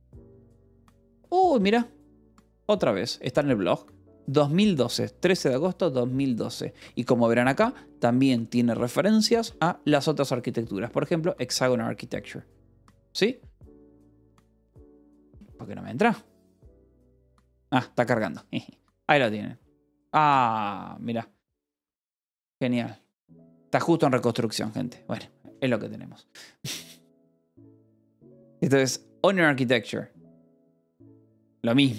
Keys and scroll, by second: 0.1 Return, 1.5 f, 2.3 h, 3.0 j, 4.9 j, 5.8 j, 9.3 f, 10.6 k, 14.0 f, 14.5 k.